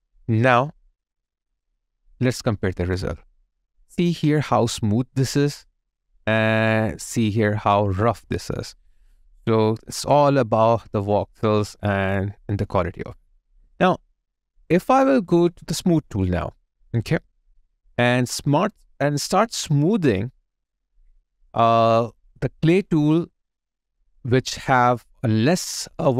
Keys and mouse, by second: 1.3 double click, 1.7 alt+click, 2.4 alt+right click, 5.3 alt+right click, 5.5 alt+middle click, 8.7 alt+right click, 9.1 alt+middle click, 9.9 alt+click, 13.1 alt+right click, 18.2 ctrl+click, 20.6 alt+click.